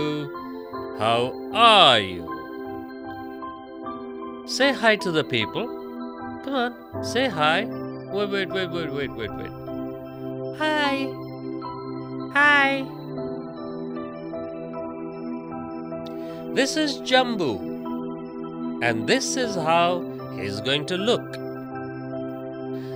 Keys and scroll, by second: 2.2 ctrl+z, 3.2 space, 4.0 space.